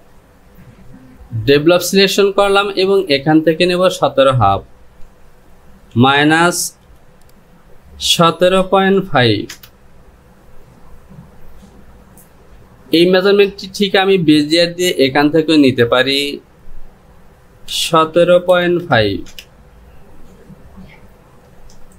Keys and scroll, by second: 5.5 Down, 9.7 Return, 18.0 KP_1.